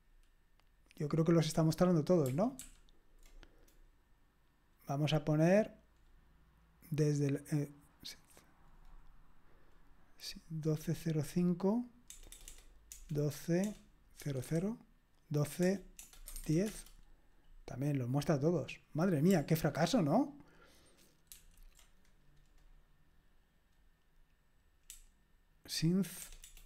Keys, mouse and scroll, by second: 2.6 ctrl+p, 12.1-14.4 typing, 15.6-16.8 typing, 21.3 ctrl+p, 24.9-26.0 BackSpace, 26.2 BackSpace, 26.4 BackSpace.